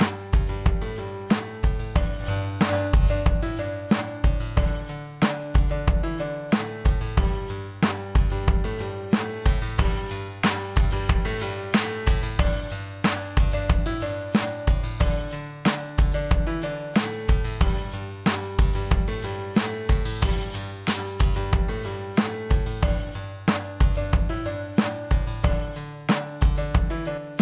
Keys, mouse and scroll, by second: 15.3-16.8 drag.